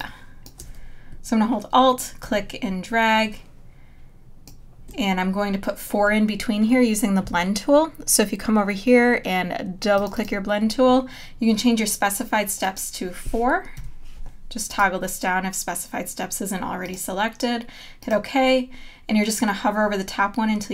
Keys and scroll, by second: 13.8 KP_4.